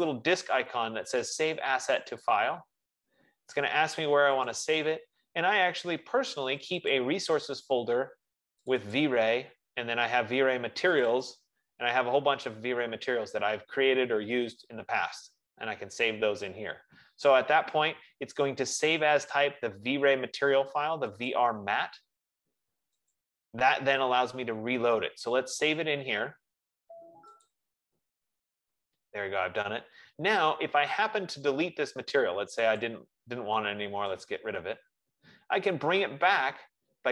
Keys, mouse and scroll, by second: 1.0 F15, 2.5 click, 5.1 click, 7.1 click, 7.3 click, 9.2 click, 9.5 click, 11.3 click, 11.7 click, 13.4-14.3 scroll, 22.5 click, 24.5 click, 28.7 click, 35.5 click.